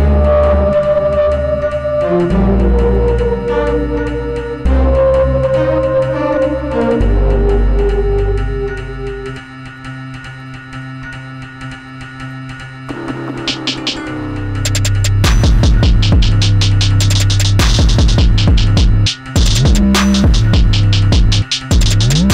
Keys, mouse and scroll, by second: 0.4 Escape, 1.0 click, 5.6 click, 9.8 click, 16.5 click.